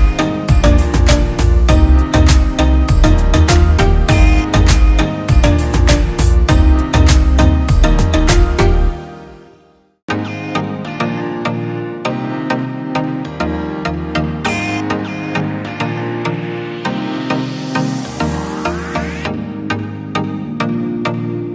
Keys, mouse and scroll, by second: 0.4 z, 0.9 alt+space, 1.8 click, 2.4 click, 2.6 click, 2.7 F4, 3.2 Escape, 3.6 space, 4.1-4.7 alt+click, 5.2 ctrl+g, 5.8 F3, 6.4 click, 6.9 c, 8.0 F3, 8.3 F2, 8.4-9.1 click, 9.0 Escape, 10.0 F8, 10.4 click, 12.5-16.5 typing, 17.0 ctrl+space, 18.6-19.2 shift+click, 20.0 c.